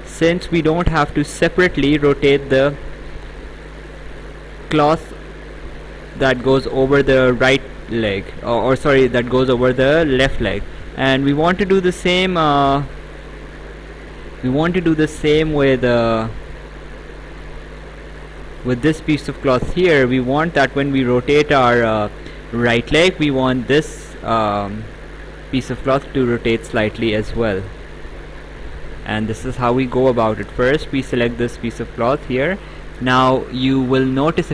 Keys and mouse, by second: 10.8 right click, 12.6 click, 14.0 Escape, 15.1 click, 26.8 click, 31.3 click, 34.1 click.